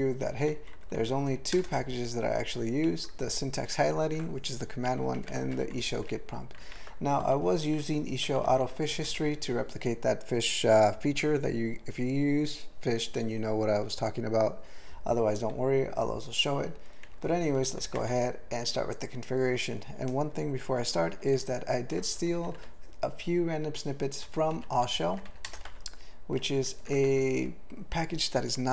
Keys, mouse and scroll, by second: 0.9 ctrl+n, 1.3 ctrl+a, 1.6 ctrl+space, 1.8 ctrl+n, 3.2 ctrl+g, 3.2 ctrl+p, 5.2 ctrl+n, 5.6 alt+b, 5.7 alt+b, 6.6 ctrl+n, 7.1 alt+f, 7.3 alt+f, 7.8 alt+b, 8.2 alt+f, 8.4 alt+f, 8.6 alt+f, 8.9 alt+b, 9.0 alt+b, 17.1 ctrl+p, 17.2 ctrl+p, 17.3 ctrl+p, 17.5 ctrl+p, 17.8 ctrl+a, 18.1 Tab, 21.4 ctrl+p, 22.1 alt+f, 22.3 alt+f, 22.5 alt+f, 24.3 alt+f, 24.5 alt+f, 24.7 alt+f, 24.9 alt+f, 25.3 ctrl+e, 25.4 ctrl+space, 25.7 alt+b, 26.7 ctrl+g, 27.1 alt+b.